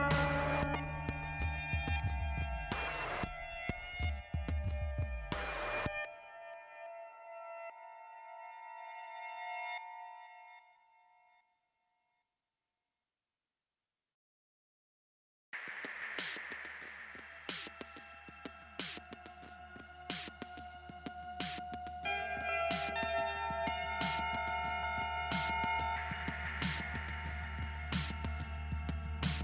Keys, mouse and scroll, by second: 3.1-4.3 scroll up 2, 4.7 click, 6.5 click, 9.4 click, 9.8 click, 17.5 click, 18.6 k, 19.7 click, 23.6 click, 24.1 3, 24.3 click, 24.4 3, 24.7 click, 24.8 3, 25.5 5, 28.1 click, 29.0-29.4 scroll down 3.